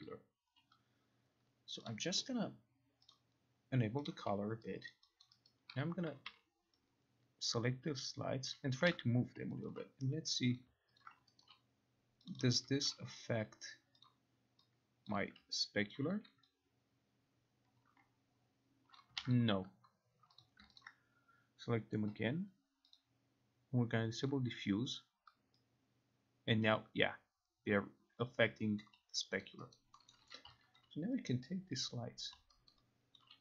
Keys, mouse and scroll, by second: 0.1 alt+right click, 1.9 click, 2.0 click, 3.3 click, 4.1 click, 5.0 alt+right click, 6.3 e, 8.8 click, 9.0 ctrl+z, 9.8 alt+click, 10.7 click, 11.1 ctrl+click, 11.5 alt+right click, 12.4 click, 12.5 click, 14.2 click, 15.1 click, 16.0 alt+click, 19.1 click, 19.3 ctrl+z, 20.5 click, 20.9 ctrl+click, 23.0 click, 24.3 click, 28.9 click, 29.5 alt+right click, 29.8 alt+right click, 30.2 middle click, 30.5 alt+e, 30.9 alt+click, 32.4 alt+click, 32.8 alt+right click, 33.3 alt+click.